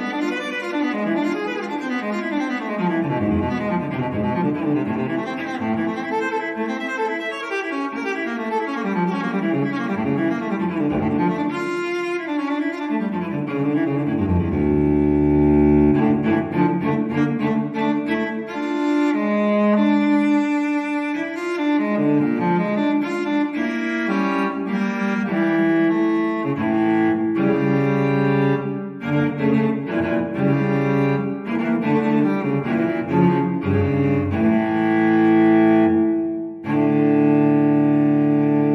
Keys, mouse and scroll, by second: 1.0 click, 2.7 click, 3.8 click, 5.0 click, 6.7 1, 8.4 5, 10.9 click, 12.1 2, 12.6 0, 15.1 click, 19.1 click, 21.8 1, 23.2 4, 24.5 0, 25.2-25.8 scroll down 2, 26.3 click, 27.5 click, 28.9 click, 31.2 click, 32.1 click, 32.6 click, 37.1 2.